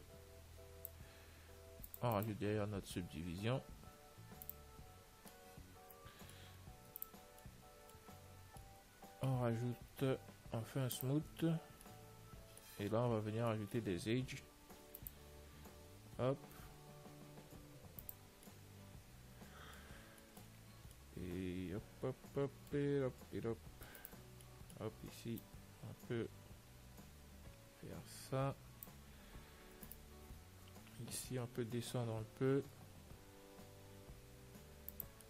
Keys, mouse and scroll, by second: 2.1-4.3 drag, 6.3-7.4 middle drag, 7.2 ctrl+s, 7.7-11.3 middle drag, 11.3 click, 11.3 t, 11.8 t, 12.1-16.9 middle drag, 13.4 Tab, 14.9 ctrl+r, 18.7-23.1 middle drag, 24.2-26.0 right drag, 24.7-26.6 middle drag, 25.7 click, 30.2-32.2 right drag, 32.2-33.5 middle drag, 33.0 g.